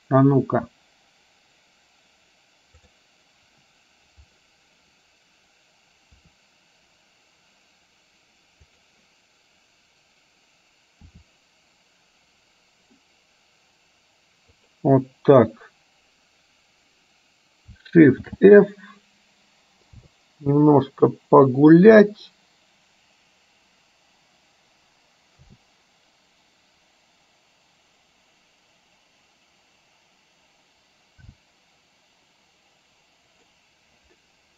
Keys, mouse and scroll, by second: 6.2 r, 8.8 click, 11.3 r, 18.4 shift+f.